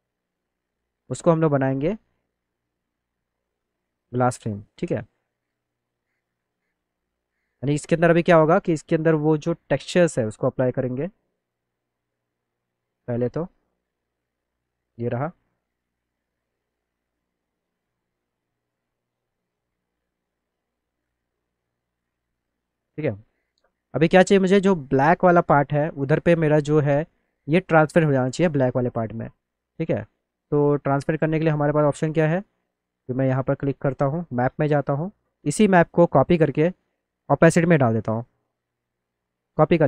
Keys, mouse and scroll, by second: 1.5 click, 3.4 click, 3.9 alt+middle click, 4.7 click, 5.6 F3, 6.2 scroll down 2, 6.4 click, 6.8 alt+middle click, 8.4 middle click, 11.3 click, 12.7 click, 12.9 click, 14.1 click, 15.0 click, 20.2 click, 21.5 click, 22.2 alt+middle click, 25.3 middle click, 27.1 middle click, 27.2 middle click, 29.4 click, 29.9 click, 31.6 click, 34.2 click, 36.4-38.2 drag.